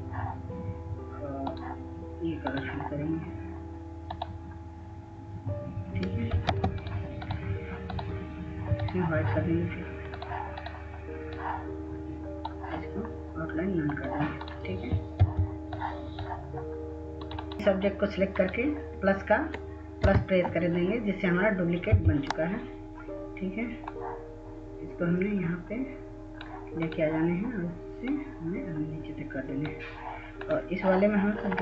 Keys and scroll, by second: 7.5 ctrl+space, 16.2 F2, 22.6 F4.